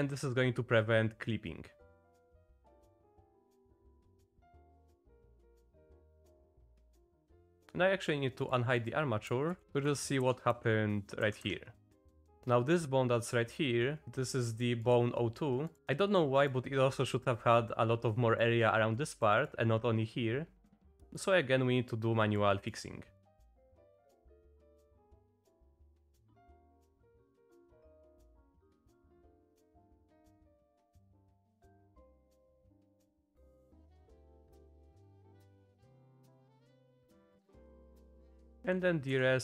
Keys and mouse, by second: 2.5 click, 2.6 click, 2.8 click, 2.9 click, 3.3 click, 3.6 click, 3.8 click, 4.5 click, 4.7 click, 5.1 click, 5.5 click, 5.7 click, 5.8 shift+click, 6.2 Down, 6.6 click, 7.3 click, 7.4 click, 7.6 Tab, 8.4 click, 8.8 click, 9.5 alt+h, 9.6 Down, 9.6 Up, 9.9 Down, 10.2 Down, 10.5 Down, 11.2 Down, 11.4 Up, 12.1 click, 14.6 click, 14.8 click, 15.8 Tab, 15.8-16.5 drag, 17.3-17.6 drag, 18.2-18.5 drag, 19.3 click, 20.9 click, 21.2-22.4 drag, 22.7 click, 23.2 click, 24.4 click, 24.5 click, 24.6 ctrl+z, 24.8 click, 25.1 click, 25.2 ctrl+z, 25.3 click, 25.8 click, 26.0 click, 26.8 click, 27.0 click, 27.2-28.2 drag, 28.3 click, 28.5 click, 29.1 click, 29.3 click, 29.6 click, 29.7 click, 30.6 click, 30.8 click, 31.0 click, 31.2 shift+click, 31.3 click, 32.0 click, 32.2 click, 32.7 click, 33.0 click, 33.1 click, 33.8 click, 34.7 click, 35.6 click, 35.9 click, 36.1 click, 36.3 click, 36.5 click, 37.6 click, 38.6 Down, 39.1 Down.